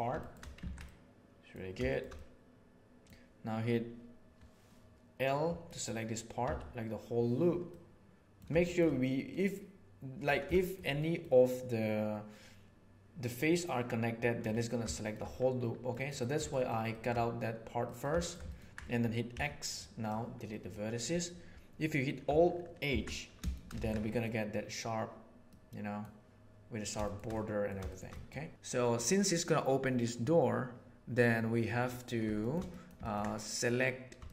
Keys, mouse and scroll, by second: 0.2 middle click, 0.6 alt+a, 0.8 middle click, 2.2 middle click, 5.7 middle click, 6.4 l, 7.6 middle click, 8.6 middle click, 10.5 shift+middle click, 10.9 middle click, 14.9 shift+middle click, 15.9 middle click, 16.5 shift+middle click, 16.9 shift+middle click, 17.8 middle click, 18.2 ctrl+shift+middle click, 19.3 x, 20.5 middle click, 22.9 alt+h, 23.3 shift+middle click, 23.8 alt+a, 24.0 middle click, 25.5 middle click, 27.3 middle click, 27.8 shift+middle click, 31.6 middle click, 32.3 shift+middle click, 32.7 middle click, 32.9 ctrl+middle click, 34.2 shift+middle click.